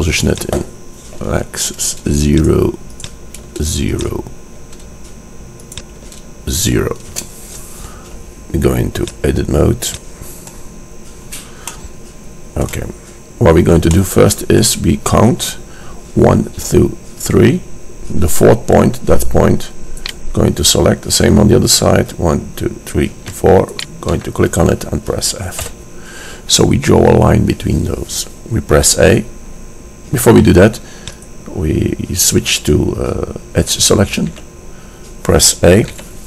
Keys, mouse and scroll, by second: 0.6-2.1 drag, 3.1-4.8 drag, 4.8 KP_0, 10.7 click, 11.0-20.0 middle drag, 20.0-22.2 drag, 23.8-25.7 drag, 25.7 f, 31.4-33.8 drag, 34.7 a, 36.1 a.